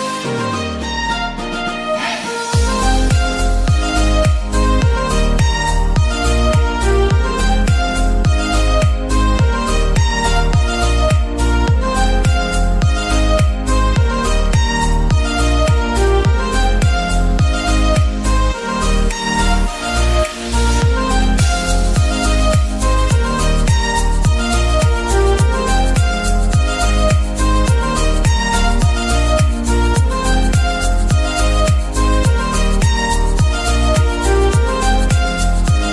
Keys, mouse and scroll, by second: 0.2 s, 1.4 scroll down 3, 1.6-3.2 middle drag, 3.2-4.4 drag, 4.6 middle click, 5.1 click, 5.7-6.1 scroll down 4, 6.1 g, 8.5 click, 9.4 shift+middle click, 10.0 Tab, 10.2-10.7 scroll up 3, 10.7-11.8 middle drag, 11.8 click, 12.0-12.5 scroll down 3, 12.5-13.1 middle drag, 13.1 click, 13.3-13.7 scroll up 4, 13.7 Tab, 14.3 ctrl+r, 18.5 click, 19.7 alt+click, 20.4 alt+click, 21.7 alt+shift+click, 22.8 alt+shift+click, 23.7 alt+shift+click, 24.6 alt+shift+click, 25.6 alt+shift+click, 26.5 alt+shift+click, 27.4 alt+shift+click, 28.4 alt+shift+click, 29.5 alt+shift+click, 30.5 alt+shift+click, 31.5 alt+shift+click, 32.4 alt+shift+click, 33.3 alt+shift+click, 35.4 shift+d.